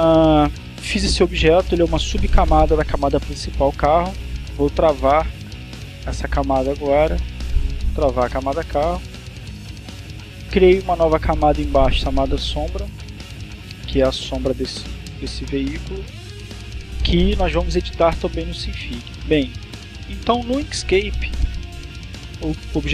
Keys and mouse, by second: 4.5 click, 7.2 click, 8.1 click, 11.5 click, 21.7 click.